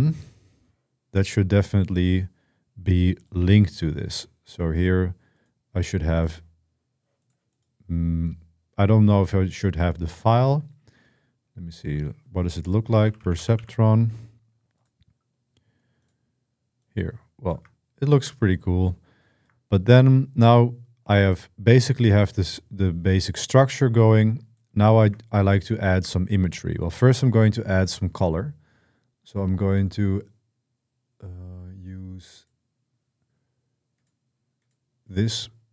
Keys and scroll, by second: 12.4-13.9 typing.